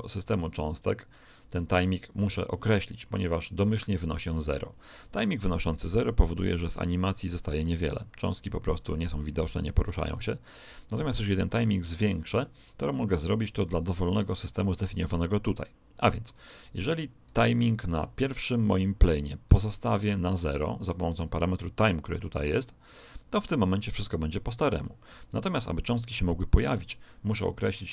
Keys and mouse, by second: 5.8 click, 17.2 right click, 27.8 click.